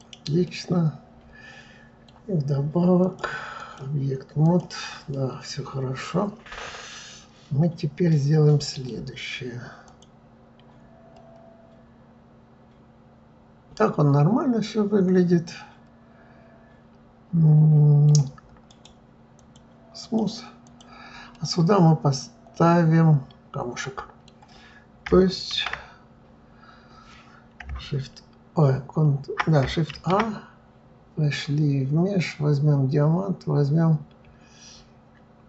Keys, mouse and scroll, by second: 0.4-3.0 middle drag, 3.0-4.6 drag, 5.1-8.2 middle drag, 9.8 click, 11.1-14.1 middle drag, 18.7-20.0 right drag, 20.0 click, 20.6 click, 21.3-24.3 middle drag, 25.5 shift+a, 29.9 shift+a.